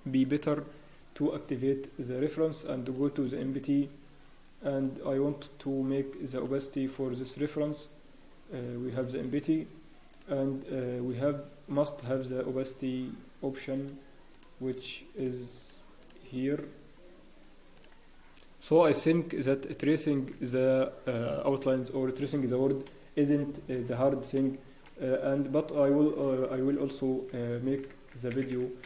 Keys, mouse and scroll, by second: 17.8 scroll down 1, 23.9-24.4 scroll up 1, 25.7 click, 27.2 scroll down 1, 28.3 Tab, 28.3 click, 28.3 scroll down 4, 28.3 a.